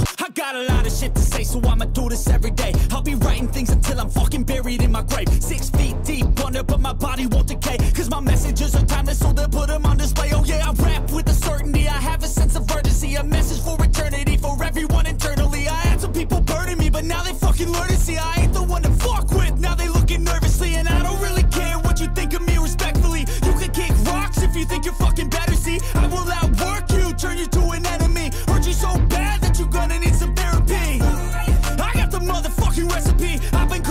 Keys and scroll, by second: 9.0 ctrl+z, 9.8 ctrl+-, 10.4 ctrl+=, 15.4 ctrl+-, 17.6 ctrl+=, 22.1 ctrl+-.